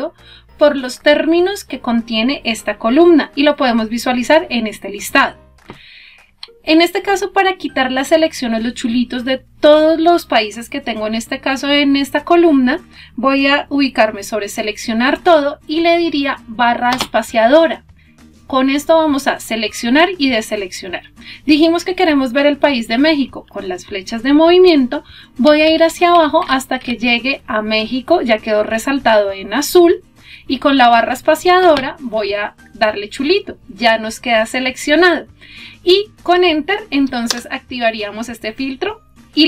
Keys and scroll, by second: 14.9 space, 31.1 space, 35.9 Return.